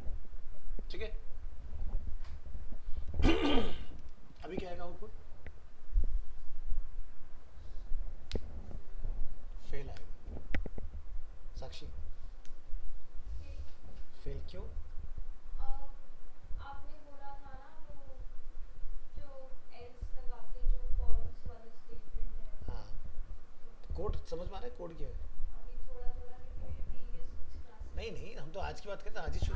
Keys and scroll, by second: 4.3 ctrl+s.